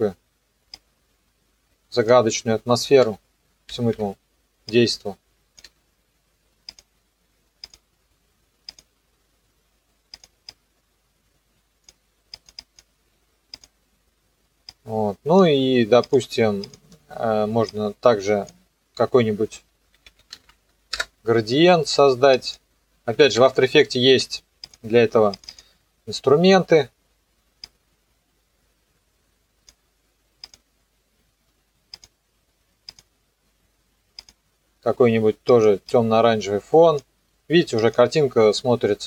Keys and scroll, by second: 19.7-21.0 typing, 22.9-23.8 typing.